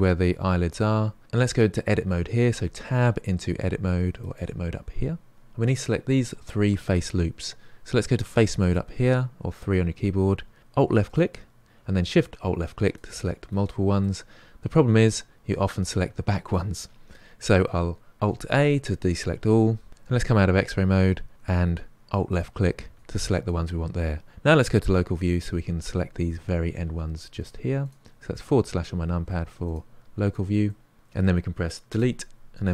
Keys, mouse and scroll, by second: 2.5 Tab, 4.2-5.3 drag, 8.6 click, 10.8 alt+click, 11.3 alt+shift+click, 12.8 alt+shift+click, 14.0-17.1 middle drag, 18.2 alt+a, 19.9 alt+z, 22.3 alt+click, 22.9 alt+shift+click, 24.8 KP_Divide, 25.5 middle click, 26.1-27.3 scroll up 2, 27.3 shift+click, 27.8 shift+click, 28.3 shift+click, 29.6 shift+click, 30.2 shift+click, 30.6-31.8 middle drag, 31.8 Delete.